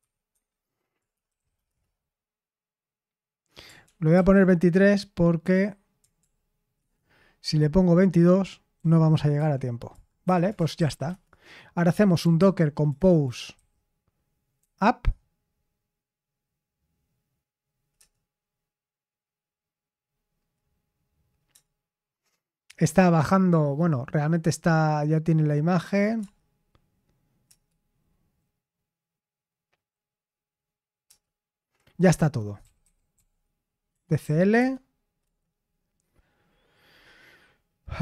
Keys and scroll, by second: 0.0-2.0 typing, 3.8 ctrl+p, 4.1 ctrl+p, 6.1 ctrl+p, 6.7 Return, 8.5-13.5 typing, 10.2 Escape, 14.5 typing, 17.9 Return, 26.1 Return, 27.4 Return, 31.0 Return, 32.3-34.1 typing, 34.5 Return, 35.2 Return.